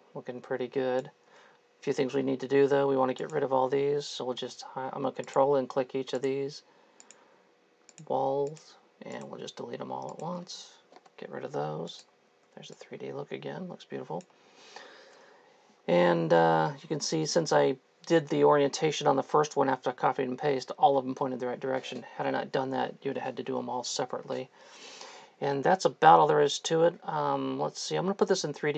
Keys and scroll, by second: 1.5 Escape, 11.2 Delete, 12.4 3, 14.5 Escape, 28.6 3.